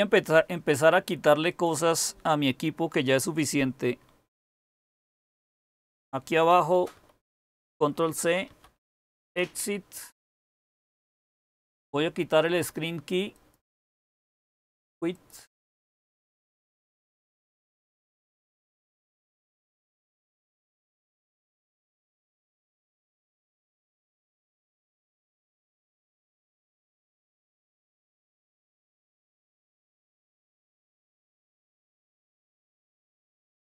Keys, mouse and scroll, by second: 6.9 ctrl+c, 8.0-9.3 typing.